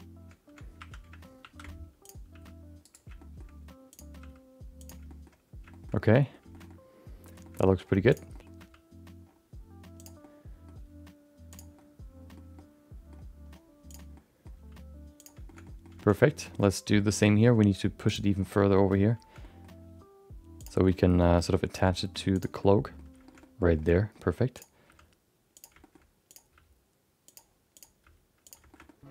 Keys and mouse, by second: 0.8 1, 1.4 shift+2, 2.0 click, 2.3 g, 3.1 shift+middle click, 3.9 click, 4.2 g, 5.0 shift+middle click, 5.7 shift+middle click, 6.0 middle click, 6.5 shift+middle click, 6.7 middle click, 7.4 shift+middle click, 7.6 middle click, 8.1 click, 8.3 middle click, 8.6 g, 10.2 middle click, 10.7 g, 11.7 middle click, 12.5 middle click, 13.9 click, 14.1 middle click, 14.5 g, 15.4 shift+middle click, 15.6 middle click, 16.0 shift+middle click, 16.5 shift+middle click, 16.6 middle click, 17.2 middle click, 18.0 click, 18.4 middle click, 18.5 middle click, 19.4 middle click, 19.8 g, 20.8 middle click, 21.7 g, 22.6 middle click, 23.2 middle click, 23.4 middle click, 23.7 middle click, 23.9 middle click, 24.5 click, 24.8 g, 25.8 shift+middle click, 26.3 click, 26.5 g, 27.7 click, 28.0 g, 28.7 shift+middle click, 28.8 middle click.